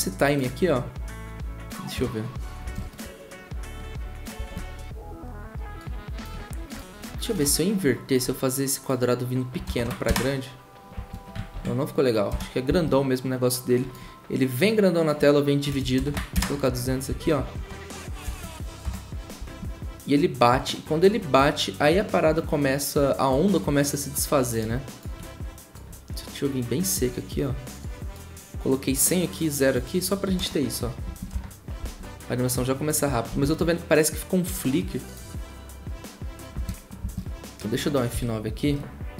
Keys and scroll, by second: 1.9 0, 2.6 0, 3.8 typing, 9.3-10.0 typing, 11.5 ctrl+z, 12.3 0, 13.8-17.5 typing, 18.8 typing, 30.4 0, 31.3 0, 33.3 ctrl+z, 36.5 F9.